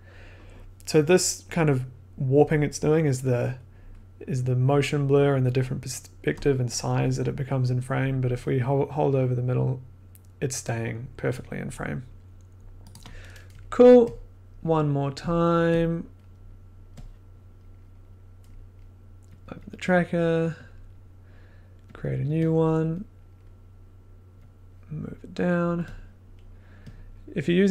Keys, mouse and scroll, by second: 12.9 click, 14.8 middle click, 15.3 click, 15.4 middle click, 15.9 click, 16.3 scroll, 17.5 click, 17.7-18.1 scroll, 19.4 click, 19.4 click, 19.5 click, 19.6 click, 20.6 click, 21.9 click, 22.7 click, 22.9 middle click, 23.1 middle click, 23.5-24.0 scroll, 25.3 click, 26.2-26.7 scroll, 27.0 click, 27.1 scroll, 27.6-27.7 scroll.